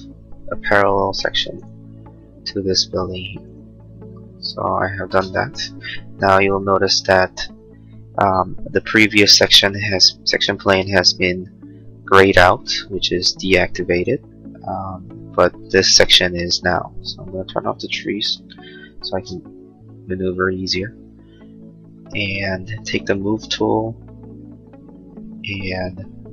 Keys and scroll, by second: 5.4 space, 22.0 space.